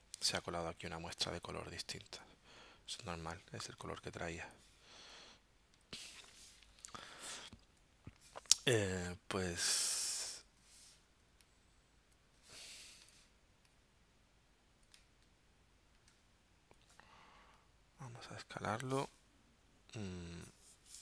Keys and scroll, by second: 1.4 shift+super+z.